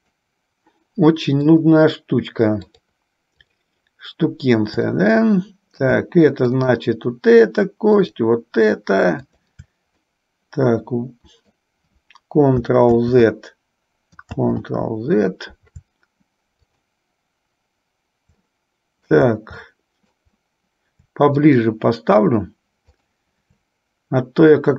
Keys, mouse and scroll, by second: 0.2 shift+click, 1.7 shift+click, 3.0-4.0 shift+drag, 5.1-6.1 middle drag, 6.6-7.7 shift+drag, 8.2 shift+click, 9.6-10.6 shift+drag, 10.6-11.9 middle drag, 13.0 ctrl+z, 16.7 shift+click, 18.6 middle click, 19.9 middle click, 21.5-22.5 shift+drag, 23.2 shift+click.